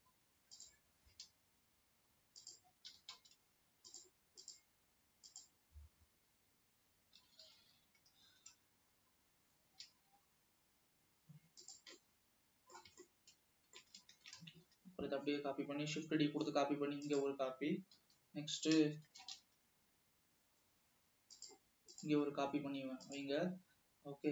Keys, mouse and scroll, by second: 1.3 s, 3.0 g, 5.7 g, 6.3 scroll up 2, 7.3 g, 12.3-14.6 middle drag, 14.6 shift+d, 18.1 l, 19.3 shift+d.